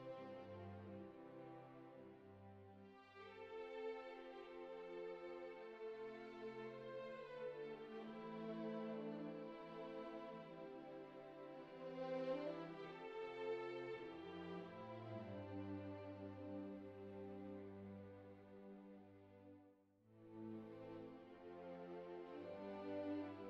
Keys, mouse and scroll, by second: 1.9-3.2 middle drag, 3.5 middle click, 4.6 middle click, 5.8 alt+r, 6.1 alt+g, 6.5 alt+s, 7.3 click, 8.9 click, 9.6 click, 10.4-13.5 middle drag, 14.1 alt+r, 15.0 alt+s, 15.9 click, 17.0 click, 20.0 right click.